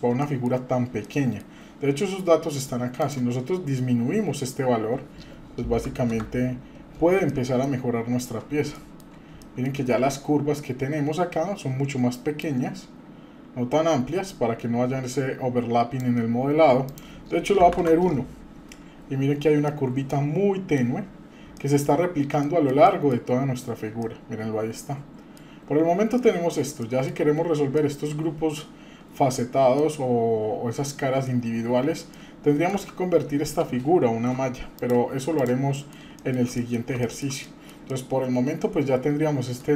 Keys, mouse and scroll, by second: 0.2 shift+middle click, 0.6-0.9 scroll up 2, 1.0 shift+middle click, 3.0-6.6 drag, 7.3 middle click, 7.8 scroll up 2, 8.7 shift+middle click, 9.4 shift+middle click, 9.8-10.3 scroll up 2, 10.5-10.9 scroll down 1, 12.4-16.0 drag, 16.9-17.9 drag, 18.7-19.2 scroll up 1, 19.2 scroll down 1, 19.7-20.7 middle drag, 21.0-21.5 scroll down 4, 21.6 shift+middle click, 22.4 middle click, 22.8 shift+middle click, 23.3-23.7 scroll up 2, 23.9 scroll up 1, 24.0-25.4 shift+middle drag, 25.4-26.0 scroll down 4, 26.2 middle click, 26.8 middle click, 27.2-29.8 scroll up 4, 27.8 shift+middle click, 29.8-31.2 middle drag, 31.2-31.9 scroll down 4, 32.1 middle click, 34.3 Tab, 34.7 click, 35.4 drag, 35.7 middle drag, 35.9 scroll down 1, 36.1-36.4 shift+middle drag, 36.5 middle click, 37.0 shift+middle click, 37.5 middle click, 37.9-39.6 middle drag.